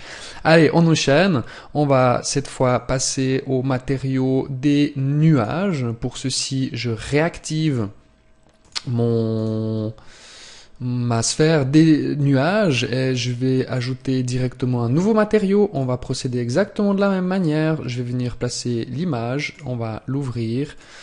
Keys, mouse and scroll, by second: 1.6 click, 7.3 right click, 8.3 click, 13.5 click.